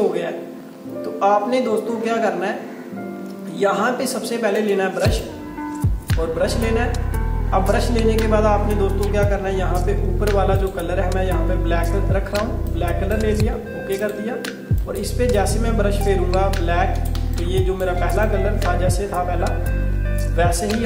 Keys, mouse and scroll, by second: 4.6 right click, 5.1 click, 10.7 click, 17.2 space, 17.4 click, 17.7 space, 18.3 click.